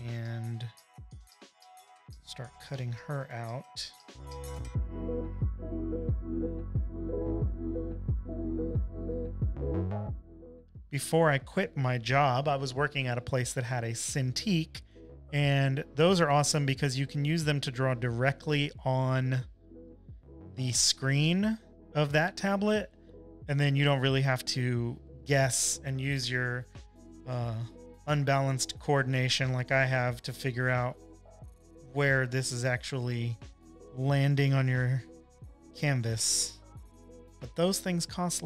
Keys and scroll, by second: 5.1 p, 5.3 super+=, 5.5 space, 5.6 space, 8.1 space, 33.6 super+z, 34.9 space, 35.4 space, 35.5 space.